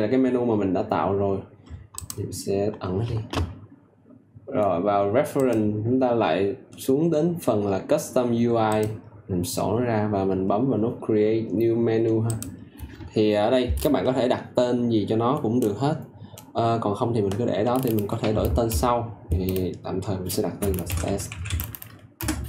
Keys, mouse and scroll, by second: 20.5-21.9 typing, 22.1 Return.